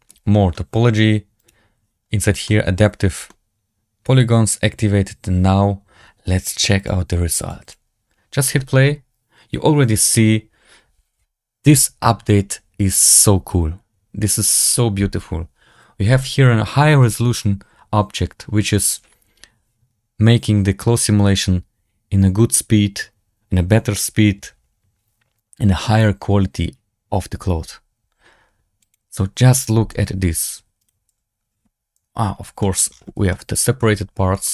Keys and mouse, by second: 0.0-0.4 middle drag, 1.3 click, 2.4 shift+middle drag, 3.2-3.8 drag, 3.2-3.8 right drag, 3.8-5.1 middle drag, 6.7 click, 7.3 drag, 7.5 click, 29.8 KP_Decimal, 30.7 right drag, 31.0 z, 31.9 KP_Decimal, 32.5 shift+drag, 33.2-33.7 shift+drag, 34.2 shift+drag.